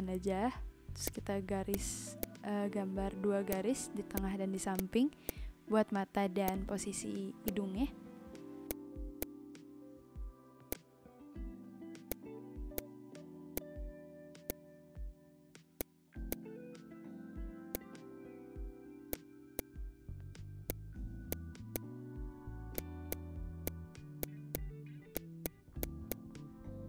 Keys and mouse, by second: 1.0 click, 1.7 click, 2.2 click, 4.7 click, 5.2 click, 6.4 click, 7.4 click, 8.7 click, 9.2 click, 10.5 ctrl+z, 10.7 click, 12.1 click, 12.7 click, 13.4 v, 13.5 click, 13.8 Delete, 14.2 b, 14.4 click, 15.6 v, 15.8 click, 16.3 shift+click, 17.7 click, 19.1 click, 19.5 click, 20.4 b, 20.6 click, 21.0 ctrl+z, 21.3 click, 21.7 click, 22.6 v, 22.7 click, 23.1 shift+click, 24.2 click, 25.1 click, 26.4 ctrl+s.